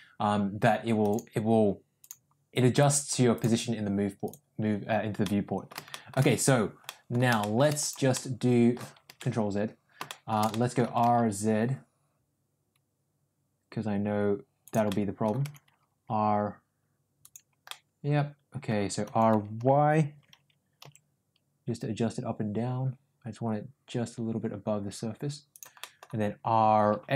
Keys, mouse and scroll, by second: 1.0 click, 1.9 click, 3.3-4.3 drag, 5.1-5.6 middle drag, 5.8 shift+middle drag, 6.7 middle click, 7.3 shift+middle drag, 7.9 click, 8.1-8.7 middle drag, 9.3 ctrl+z, 10.0 middle drag, 10.4 middle click, 10.8 r, 14.8 scroll up 1, 14.9 middle click, 15.4 r, 17.6 scroll up 1, 17.7-18.7 middle drag, 18.9 r, 25.7 middle click, 26.5 r.